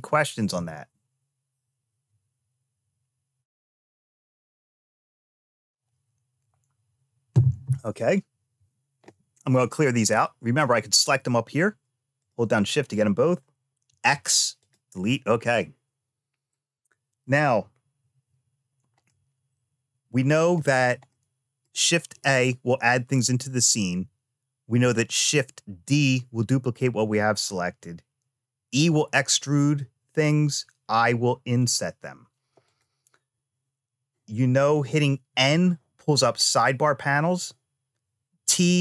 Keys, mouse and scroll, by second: 10.7 click, 12.0 shift+click, 13.6 x, 18.8-20.3 middle drag, 20.8 shift+middle click, 32.4 click, 34.5 click, 35.1 n, 37.0 n, 38.2 t.